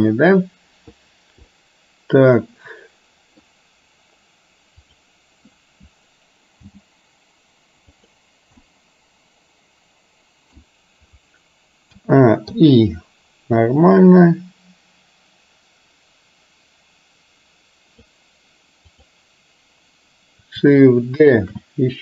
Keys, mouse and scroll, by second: 1.6-3.4 middle drag, 6.7 g, 8.6-10.7 middle drag, 12.1 a, 12.7 i, 13.8-18.2 drag, 18.9 click, 21.6 shift+d.